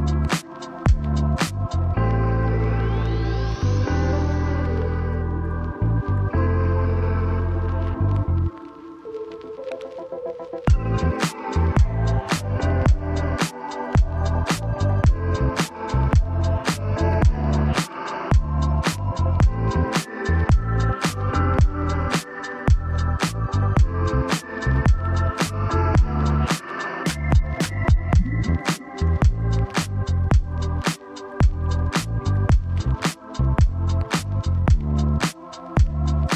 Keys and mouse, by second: 0.6 middle click, 2.0 shift+space, 5.2 Tab, 5.5 a, 6.3 middle click, 7.2 shift+space, 18.1-20.8 drag, 21.4-23.2 drag, 25.2 click, 25.2 right click, 25.5 Tab, 27.4 click, 27.4 right click, 28.7 ctrl+z, 32.0-33.0 drag, 33.7-35.5 drag.